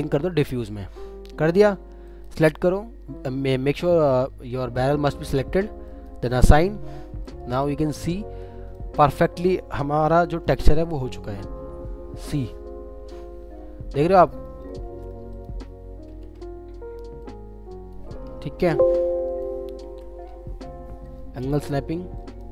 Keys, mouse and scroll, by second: 1.0-3.7 scroll up 1, 10.8 alt+middle click, 14.7 alt+middle click, 15.6-16.1 scroll down 1, 18.6 typing, 21.0 right click.